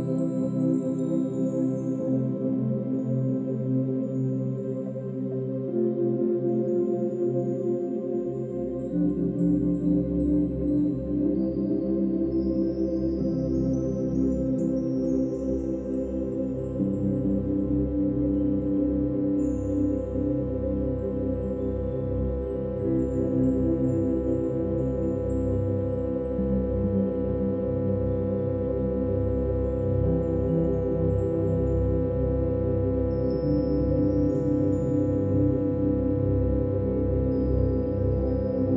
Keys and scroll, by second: 0.3 ctrl+z, 16.3 ctrl+z, 21.3 ctrl+z.